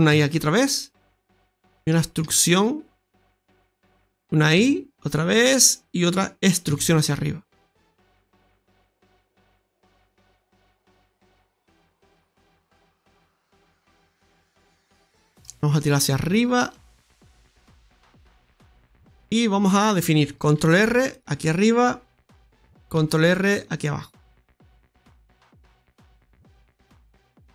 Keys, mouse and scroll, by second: 0.1 middle click, 0.3 i, 1.4 middle click, 2.0 middle click, 2.0 i, 2.2 e, 4.5 e, 4.6 i, 6.6 e, 10.4 click, 13.0-13.6 scroll down 2, 13.3 middle click, 14.0-14.3 scroll up 3, 14.7 shift+middle click, 15.0-16.6 scroll down 2, 15.4 middle click, 16.6 click, 18.7 shift+middle click, 20.5 ctrl+r, 25.8-27.0 scroll down 3, 26.7 Tab, 27.2 middle click.